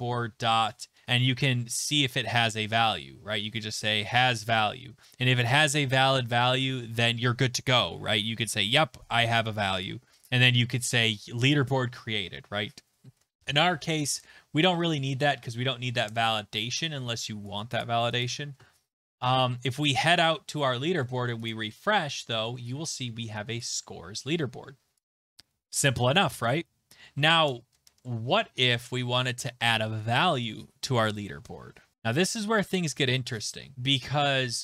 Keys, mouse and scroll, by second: 1.2 scroll down 6, 4.0 Tab, 4.0 Down, 4.0 scroll, 4.1 Down, 4.3 Down, 4.4 Down, 10.2 click, 11.5 click, 13.1 BackSpace, 14.8 Down, 15.3 BackSpace, 15.7 BackSpace, 15.9 BackSpace, 16.1 BackSpace, 16.6 ctrl+s, 17.8 click, 18.2 click, 20.0 click, 21.5 click, 27.2 alt+Tab.